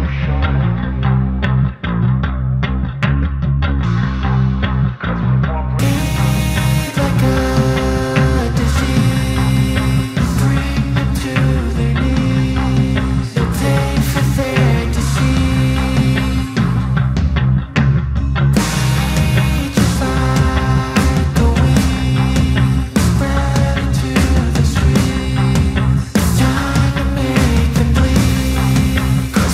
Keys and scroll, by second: 1.5 ctrl+alt+z, 1.6 ctrl+=, 2.6 ctrl+=, 28.2 space, 28.8 ctrl+-.